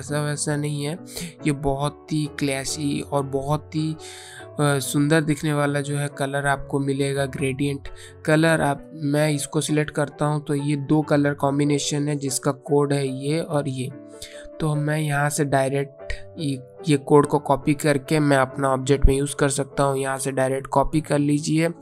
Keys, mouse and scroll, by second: 8.1 click, 19.4 click, 20.9 right click.